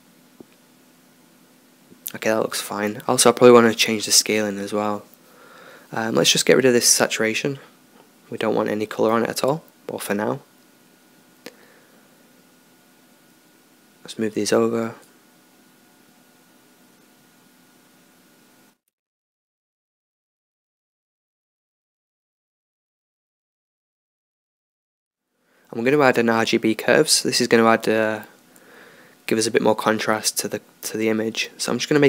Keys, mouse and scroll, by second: 5.6-8.4 middle drag, 11.8-17.8 drag, 18.5 shift+a, 28.3-31.0 drag, 31.0-32.0 middle drag.